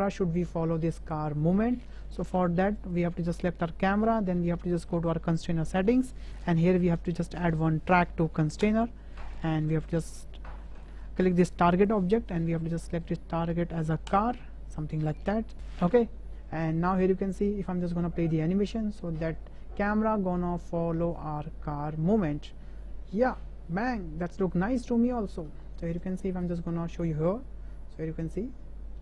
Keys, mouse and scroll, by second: 2.8 click, 7.0-8.7 drag, 18.4 space, 22.2 space, 23.3-24.3 drag, 25.0 KP_0, 25.9-26.3 drag, 26.7 shift+click, 28.4 click, 28.4-29.0 drag.